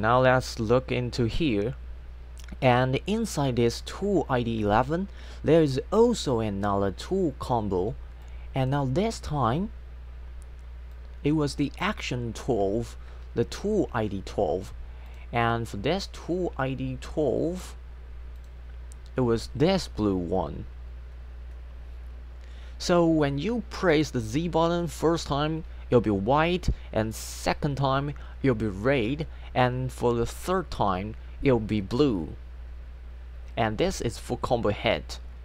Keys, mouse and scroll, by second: 0.0 click, 6.0 click, 6.5 space, 8.2 click, 11.0 click, 15.1 click, 18.4 click.